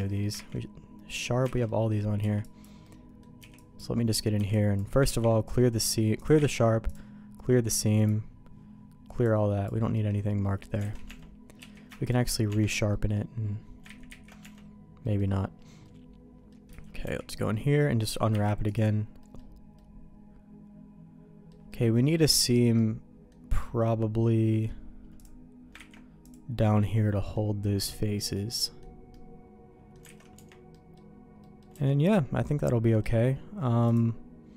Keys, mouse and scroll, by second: 0.0 middle click, 0.3 ctrl+e, 1.5 alt+a, 1.6 middle click, 2.2 b, 2.8 middle click, 3.4 b, 3.9 middle click, 4.3 b, 5.0 ctrl+e, 6.3 ctrl+e, 7.7 click, 9.2 click, 9.9 middle click, 10.4 middle click, 10.8 alt+a, 11.0 Tab, 11.6 q, 12.5 Tab, 12.9 middle click, 14.2 ctrl+z, 14.4 Tab, 15.0 middle click, 15.8 middle click, 16.7 a, 17.0 y, 18.3 u, 19.2 middle click, 19.7-21.5 middle drag, 21.7 middle click, 22.7 middle click, 23.6-24.6 middle drag, 25.1 click, 25.7 ctrl+e, 26.5 middle click, 27.6 middle click, 28.1 middle click, 28.6 middle click, 29.1 middle click, 30.1 alt+a, 30.3 Tab, 30.7 middle click, 31.4 middle click, 31.7 Tab, 32.1 middle click, 33.8 click.